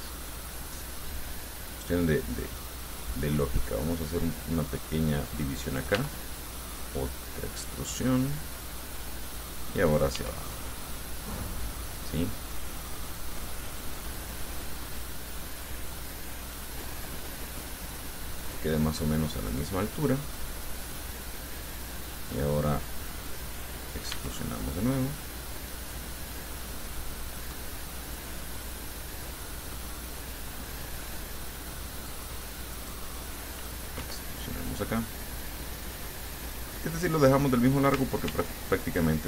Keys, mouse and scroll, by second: 5.9 click, 6.2 e, 8.4 click, 9.4 right click, 10.4 e, 18.6-20.2 drag, 20.5 click, 22.0 right click, 24.3 e, 27.5-30.4 drag, 31.0-32.5 drag, 33.0 right click, 33.4 middle click, 34.2 e, 36.6 right click, 36.9 middle click, 38.5 ctrl+r, 38.9 ctrl+click.